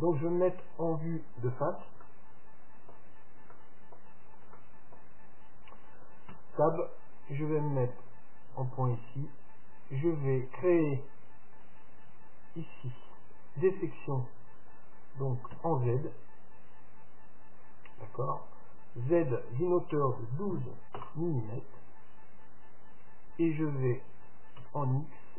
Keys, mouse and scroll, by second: 0.8-6.6 middle drag, 6.4 Tab, 8.1-9.9 drag, 11.7-13.6 drag.